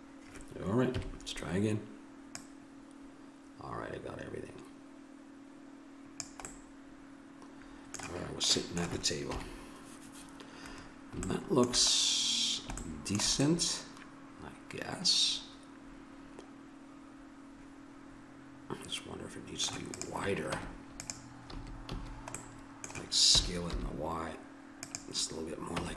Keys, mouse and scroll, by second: 0.9 KP_3, 2.3 click, 2.6 click, 6.4 middle click, 8.3 middle click, 9.2 KP_7, 13.5-15.3 middle drag, 19.9-21.9 drag, 20.5 Tab, 21.5 a, 21.9 a, 22.4 middle click, 23.3 s, 25.8 Tab.